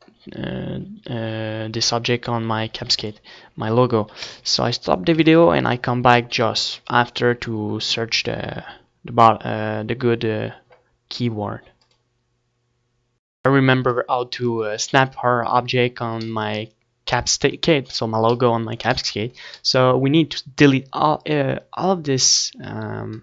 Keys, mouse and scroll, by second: 2.6 ctrl+s, 4.0 KP_1, 4.9 ctrl+s, 13.6-20.3 middle drag, 13.7 Tab, 20.3 Tab.